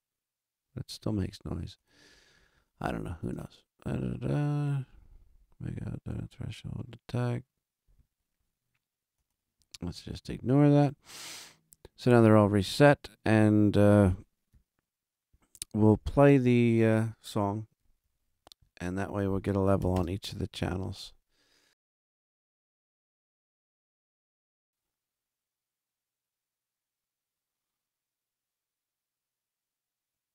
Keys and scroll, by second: 15.9 super+=, 17.9 alt+a, 19.7 Return, 19.9 space.